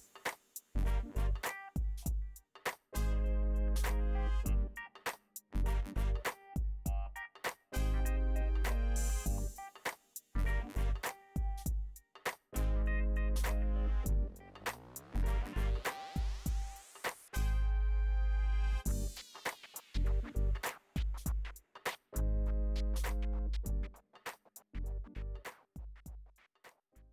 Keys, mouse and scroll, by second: 0.5 click, 1.4-3.4 drag, 3.4 ctrl+z, 4.0-5.1 drag, 5.1 middle click, 5.5 click, 6.0 middle click, 6.1 click, 6.6 middle click, 8.8-10.6 drag, 11.0 click, 13.0 click, 14.0-17.3 drag, 17.4 4, 17.7 click, 18.0 ctrl+z, 18.1 click, 20.3 ctrl+z, 21.2-24.0 drag, 21.5 right click, 24.0-25.3 right drag, 25.3 middle click, 26.1 click, 26.3 middle click.